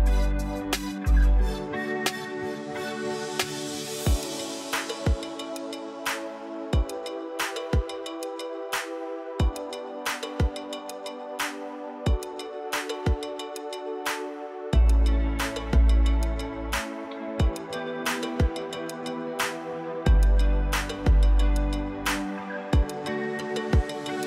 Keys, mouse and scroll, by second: 12.2 3, 24.1 0.